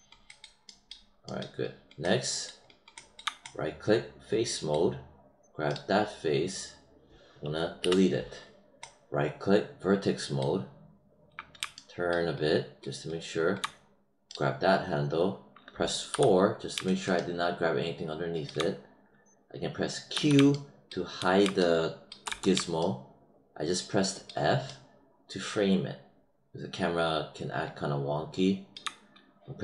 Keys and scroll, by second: 7.7 BackSpace, 20.1 q, 22.2 f.